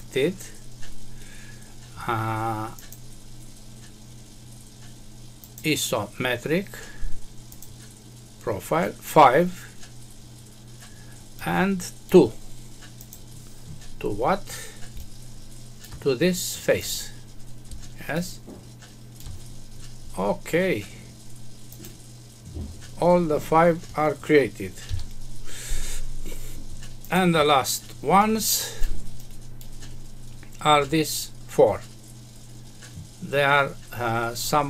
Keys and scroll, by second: 24.8 F6.